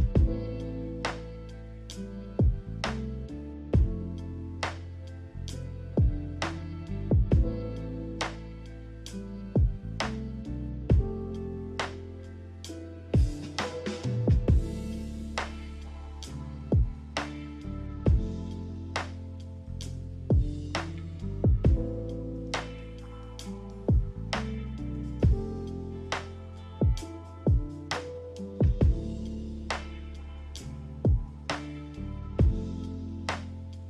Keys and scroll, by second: 10.7-12.6 typing, 27.5 z.